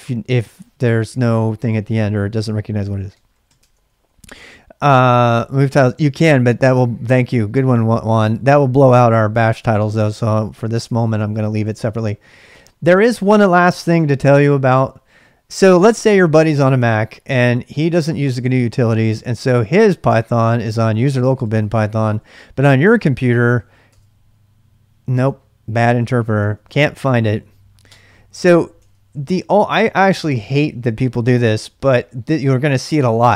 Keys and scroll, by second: 2.6-3.9 typing, 9.7 Tab, 9.7 typing, 10.7 Return, 11.3-12.1 typing, 15.8 typing, 17.1-24.0 typing, 19.3 ctrl+[, 26.4 ctrl+[, 26.6 k, 27.0 k, 27.8 Return, 28.8 ctrl+[, 29.1 l, 29.2 l.